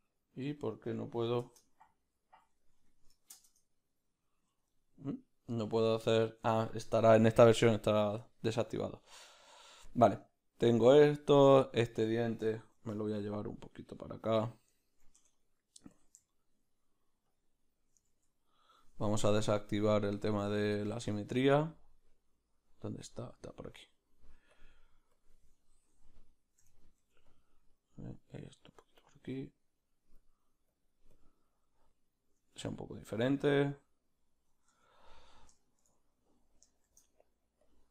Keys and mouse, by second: 0.6 middle click, 5.8 ctrl+middle click, 7.5 middle click, 8.2 ctrl+middle click, 8.5 middle click, 9.4 ctrl+middle click, 9.9 middle click, 12.7 shift+d, 14.4-17.7 middle drag, 16.0 Tab, 16.0 b, 17.7-27.7 drag, 18.1 ctrl+z, 25.7-28.1 middle drag, 27.7 f, 28.1-35.2 drag, 28.8 f, 32.7 f, 34.9 Tab, 35.2 right click, 35.6-37.9 shift+middle drag, 36.9 shift+d.